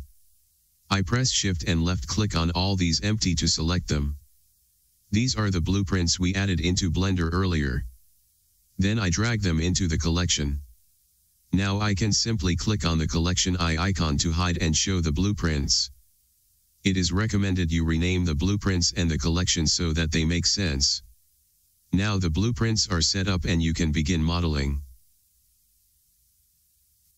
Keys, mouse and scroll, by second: 1.9 click, 2.4 shift+click, 9.7 click, 12.9-25.1 drag.